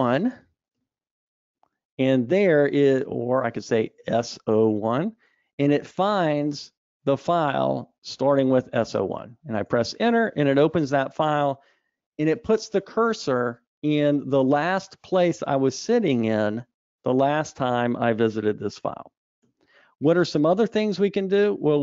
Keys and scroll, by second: 19.6 super+e.